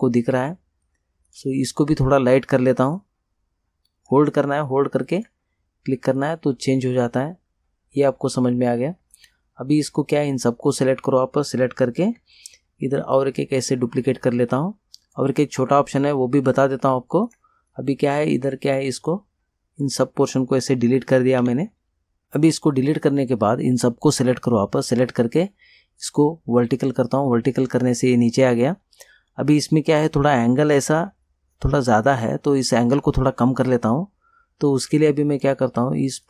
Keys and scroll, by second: 21.5 Delete.